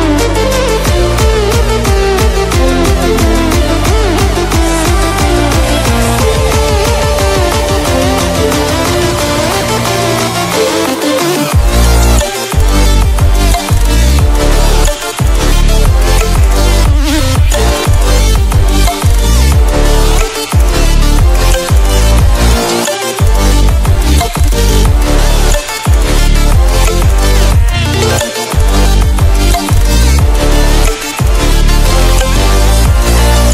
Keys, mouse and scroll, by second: 0.8 scroll down 1, 2.9-6.1 drag, 6.5 scroll up 1, 7.2-11.1 drag, 11.1 scroll down 1, 11.6-18.3 drag, 18.3 right click, 20.4 click, 21.4 right click, 25.4 click, 26.7 scroll up 1, 27.3-29.4 drag, 29.4 ctrl+z, 29.9 scroll down 1, 30.3 click, 31.9 scroll up 1, 32.6-33.5 drag.